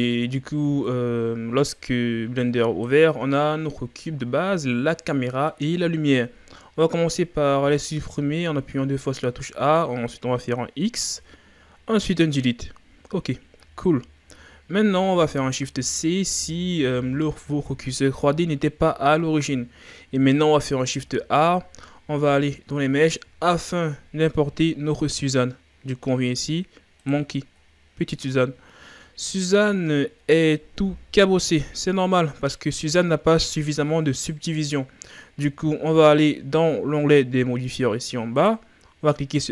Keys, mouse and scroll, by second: 4.1-5.0 scroll down 1, 5.0-8.8 middle drag, 8.8 ctrl+scroll up 2, 11.0 x, 28.5-29.0 scroll up 3, 29.0 ctrl+scroll down 1, 29.5-29.9 scroll up 2, 30.3 shift+scroll down 3, 31.5-38.5 drag.